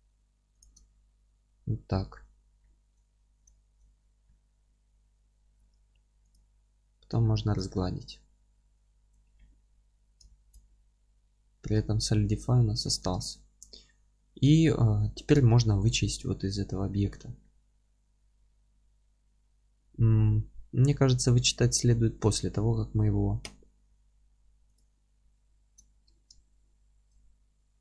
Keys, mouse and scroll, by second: 0.6 click, 0.9-24.7 alt+middle drag, 2.3 scroll up 1, 6.3 q, 6.9-7.3 scroll down 1, 14.5-14.8 scroll down 1, 24.7 click, 25.2 alt+q, 25.9 Tab, 26.3-27.8 alt+middle drag, 27.2-27.5 scroll up 1.